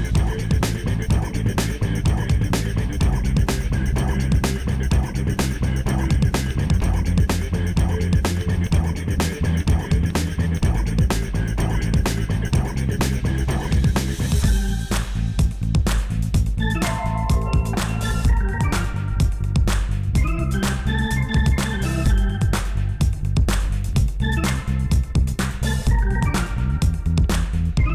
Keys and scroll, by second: 10.3 x, 13.2 x, 15.4 0, 18.7 ctrl+alt+0.